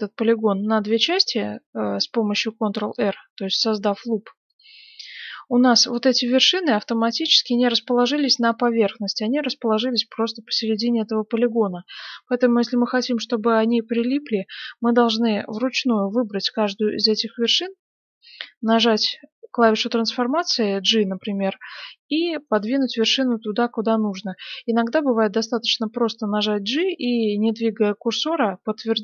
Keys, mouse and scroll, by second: 5.1-6.9 middle drag, 7.4-10.2 middle drag, 10.4-12.2 middle drag, 12.9-14.7 middle drag, 13.6 right click, 15.1-16.6 middle drag, 17.5 g, 22.4 right click, 23.3 g.